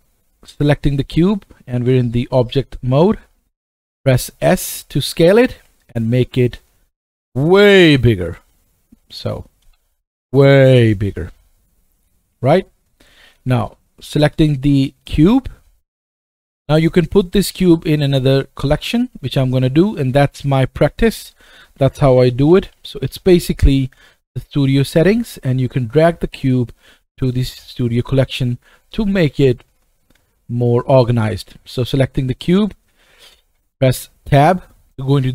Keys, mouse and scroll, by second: 0.3 click, 0.8 click, 4.4-5.8 drag, 4.4 s, 5.8 right click, 6.3 click, 6.4 right click, 6.5 click, 6.6 right click, 7.0 click, 7.7 right click, 8.2-8.8 scroll down 2, 8.8-9.5 scroll down 1, 9.6 click, 9.6 s, 11.2-12.9 scroll down 1, 12.9 click, 13.5 click, 18.9 click, 19.2 right click, 20.5 click, 21.4 F2, 24.5 click, 24.9 click, 25.8-26.8 drag, 31.3 click, 32.3 click, 34.3 Tab.